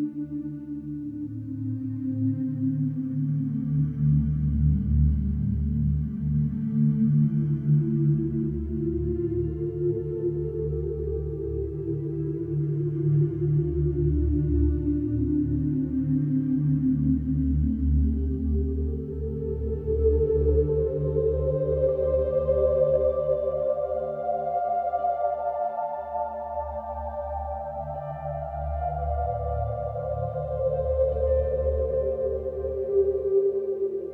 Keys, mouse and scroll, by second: 1.6 Tab, 2.0 scroll down 2, 2.3-3.3 middle drag, 3.3-4.0 right drag, 4.0 scroll up 1, 4.7 click, 4.9 scroll down 2, 5.5 click, 6.0-6.9 middle drag, 6.9 Tab, 8.2 alt+middle click, 8.4 alt+middle click, 9.7 click, 10.0 click, 11.0 click, 12.1 click, 12.3 middle click, 12.8 scroll up 1, 13.2-14.9 shift+middle drag, 14.9 alt+b, 16.0 ctrl+b, 18.8 alt+e, 21.6 Tab, 21.9-23.4 middle drag, 23.5 click, 24.0 click, 24.7 Tab, 25.2 click, 25.9 click, 26.1 click, 26.9 e, 33.1-34.1 shift+middle drag.